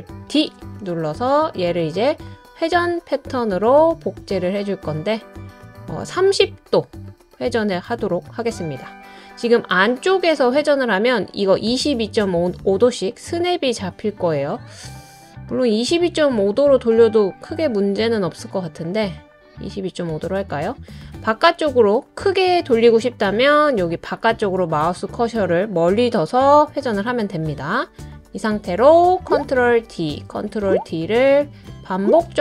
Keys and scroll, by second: 0.3 super+d, 29.8 super+d, 30.5 super+d, 31.1 super+d.